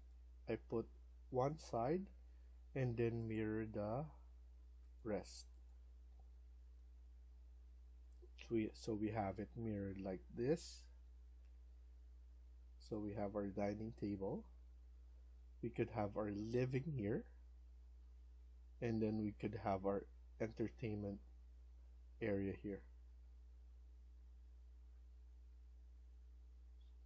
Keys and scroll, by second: 6.0 Escape, 6.2 Escape, 7.8 Escape, 8.2 Escape.